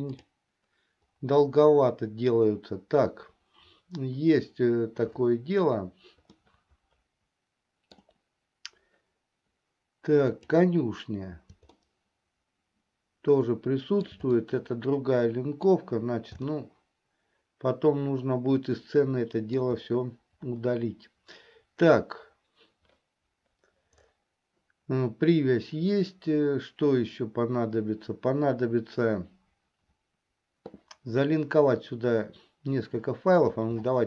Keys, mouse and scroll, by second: 7.1-9.1 middle drag, 11.1 click, 12.5-16.2 shift+middle drag, 16.9-20.1 shift+middle drag.